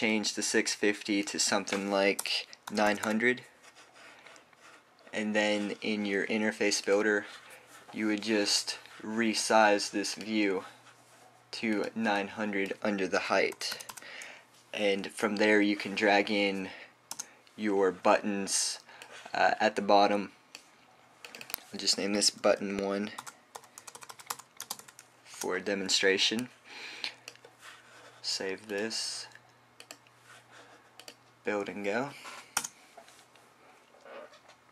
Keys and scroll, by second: 3.4-4.6 typing, 14.2-15.3 typing, 23.9-26.3 typing, 29.0 typing.